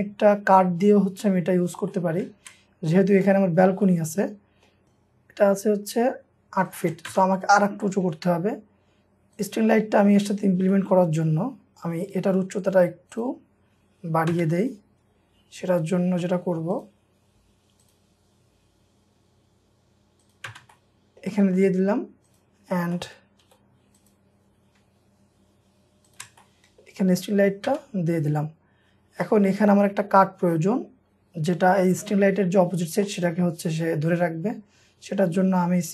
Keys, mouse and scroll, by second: 1.9 middle click, 3.4 scroll up 1, 3.9 middle click, 6.0 shift+scroll up 1, 6.7 shift+click, 7.1 space, 7.3 scroll down 1, 7.7 scroll up 1, 7.9 middle click, 8.4 scroll up 1, 9.7 scroll down 1, 10.7 middle click, 14.3 space, 20.5 space, 20.7 middle click, 21.6 scroll up 1, 23.0 middle click, 23.5 m, 23.7-24.4 scroll up 2, 25.2 m, 26.1 shift+click, 26.4 shift+middle click, 27.0-27.5 scroll down 1, 27.7 space, 28.2 scroll up 1, 28.9-29.9 scroll down 1, 29.9 scroll up 1, 30.2 middle click, 31.3-31.8 scroll up 1, 31.8-32.6 scroll down 1, 32.9 scroll up 1, 33.1 middle click, 34.5-34.8 scroll up 1.